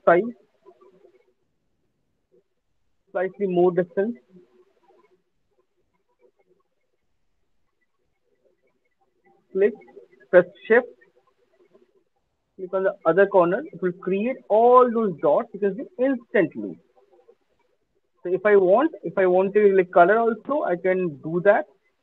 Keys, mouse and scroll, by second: 0.1 [, 4.5 click, 6.1 click, 6.1 alt+middle click, 6.4 alt+right click, 6.6 alt+click, 7.0 alt+middle click, 7.6 alt+click, 9.3 click, 13.2 shift+click, 17.7 alt+click, 18.9 click, 20.3 click.